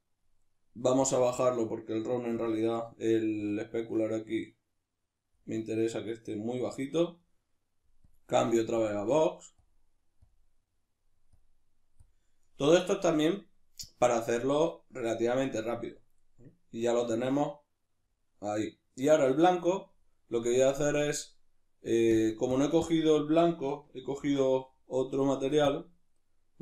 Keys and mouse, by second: 1.0-7.2 drag, 7.2-8.0 middle drag, 8.0-10.6 drag, 10.6-11.3 middle drag, 11.3-12.5 drag, 12.5-13.9 middle drag, 13.9-16.2 drag, 16.2-20.9 middle drag, 20.9 click, 22.1 drag, 22.5 click, 24.2 ctrl+shift+t.